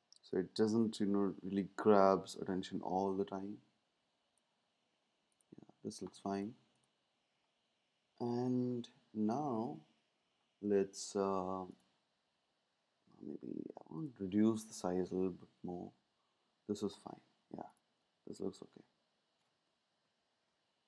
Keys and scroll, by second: 14.8 Down, 15.2 Down.